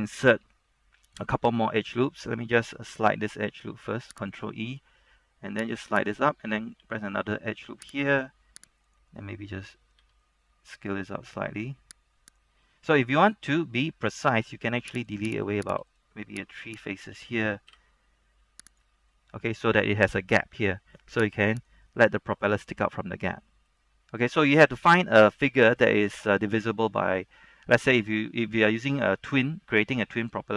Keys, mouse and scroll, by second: 3.0 ctrl+e, 4.4 click, 6.9 ctrl+r, 8.2 click, 9.7 d, 10.2 s, 12.4 click, 12.7 middle click, 13.9 shift+middle click, 14.6 ctrl+Tab, 15.2 click, 15.6 right click, 16.9 shift+right click, 17.8 shift+x, 18.8 click, 19.3-21.7 middle drag, 21.7 right click, 22.0 middle click, 22.7 scroll down 1, 23.0-28.6 middle drag.